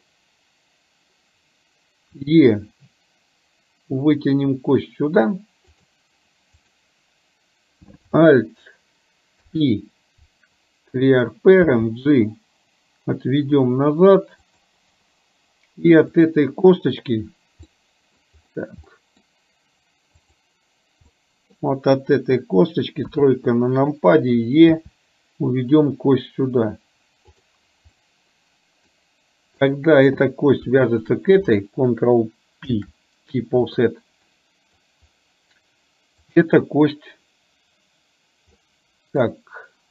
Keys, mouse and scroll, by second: 2.2 e, 6.7 click, 9.5 alt+p, 11.8 g, 16.2 click, 17.8 middle click, 19.0 middle click, 20.4 click, 21.3 middle click, 23.0 KP_3, 24.8 e, 28.0-29.0 middle drag, 30.9 shift+click, 32.8 ctrl+p, 34.4 middle click, 36.4 click, 38.8 middle click.